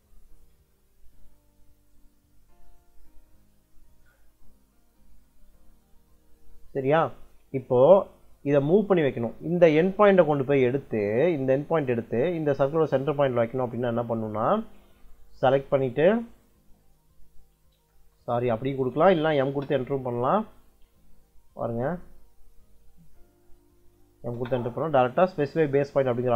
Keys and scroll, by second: 8.7 m, 9.5 Escape, 13.5 Escape, 17.9 Escape, 18.6 m, 19.3 space, 20.2 Escape, 23.7 m, 24.2 space.